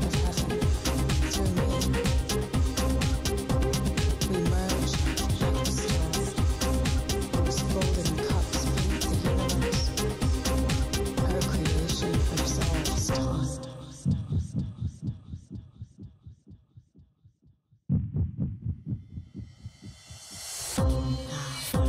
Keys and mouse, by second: 1.1 g, 2.0 g, 2.5-4.9 right drag, 2.6 g, 3.7 g, 5.9 k, 7.5 ctrl+Tab, 8.2 ctrl+x, 8.5 middle click, 9.5 k, 12.5 ctrl+Tab, 13.2 ctrl+x, 13.5 ctrl+x, 13.8 ctrl+Tab, 16.0-17.4 drag, 17.4 right click, 18.6 click, 19.2 right click, 19.2 click, 19.3 right click, 19.7 middle click, 20.1 right click, 20.9 click, 21.1 click, 21.5 click, 21.8 click.